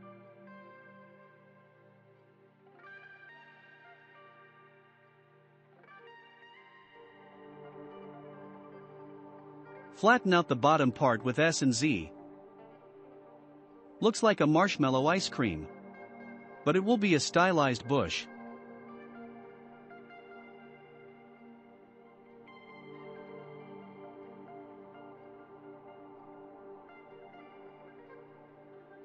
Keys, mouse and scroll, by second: 0.5 click, 2.5 click, 5.4 shift+middle click, 6.3-6.9 scroll down 1, 7.2 scroll down 2, 7.2-8.4 shift+middle drag, 8.4 s, 11.2 click, 11.8 Tab, 12.0 click, 12.3-12.8 scroll down 1, 12.8-15.0 shift+middle drag, 15.0 click, 15.6 s, 17.7-18.1 scroll up 4, 18.3-24.9 middle drag, 24.9-26.9 drag, 26.9-28.6 shift+middle drag, 28.6 s.